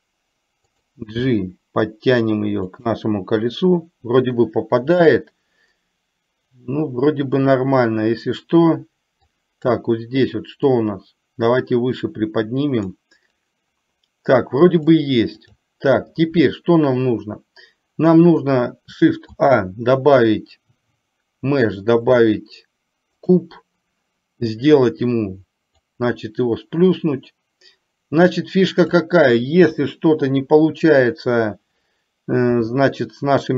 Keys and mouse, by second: 1.4 g, 9.4 click, 10.9-13.1 drag, 14.9-15.7 drag, 19.4 shift+a, 26.1-28.9 drag, 32.7 s.